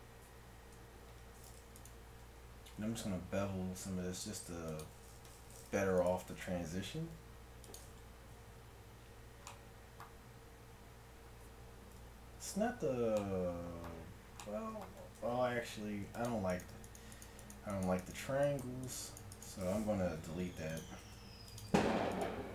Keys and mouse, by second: 0.8 Tab, 2.8 ctrl+b, 6.1-7.8 right drag, 6.9 g, 8.4 Tab, 11.6 middle click, 12.0 KP_1, 12.6 Tab, 15.2 ctrl+Tab, 20.2 x, 21.0 ctrl+Tab.